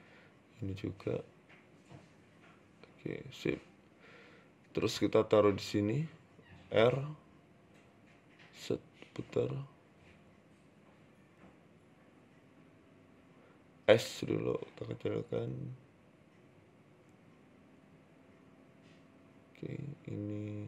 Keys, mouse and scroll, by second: 0.0 right click, 0.1 r, 0.9-1.4 scroll down 3, 1.2 Tab, 1.4 middle click, 1.8-2.1 scroll down 2, 2.1 Tab, 3.1 click, 3.8 scroll down 2, 4.0 middle click, 4.3 KP_7, 5.1 g, 5.7 scroll up 4, 5.9 shift+middle click, 6.9 r, 7.7 KP_3, 8.4 r, 9.2 middle click, 10.4-11.0 scroll down 1, 11.0 shift+right click, 11.0 scroll down 2, 11.5 ctrl+z, 12.0 shift+right click, 13.8 s, 14.5 KP_1, 15.0-15.3 scroll up 7, 15.4 scroll down 2, 16.4 right click, 17.2 right click, 19.9 right click, 20.4 shift+right click.